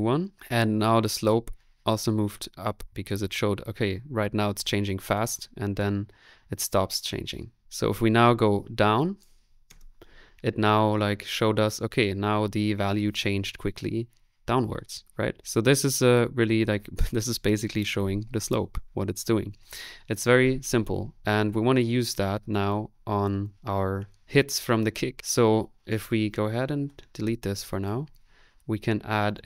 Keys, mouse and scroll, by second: 8.0 middle click, 8.9 click, 26.8 Delete.